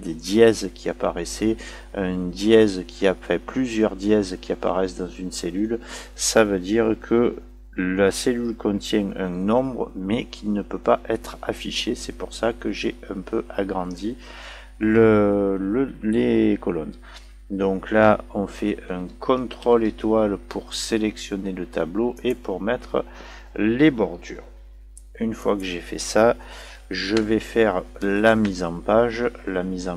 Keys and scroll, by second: 19.6 ctrl+*.